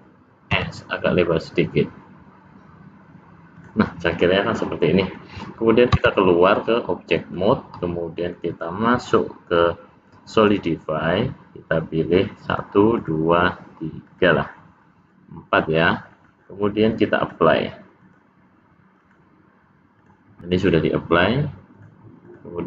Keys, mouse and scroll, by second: 0.5 s, 4.2 middle click, 6.0 Tab, 6.6 middle click, 8.4 click, 12.5 click, 13.0 click, 14.1 click, 15.0 middle click, 17.2 click, 19.0 click, 20.0 click, 21.8 click.